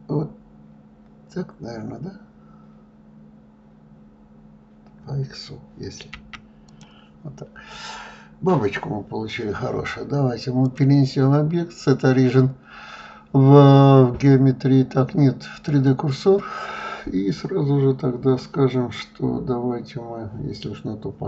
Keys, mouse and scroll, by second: 11.1-14.1 drag.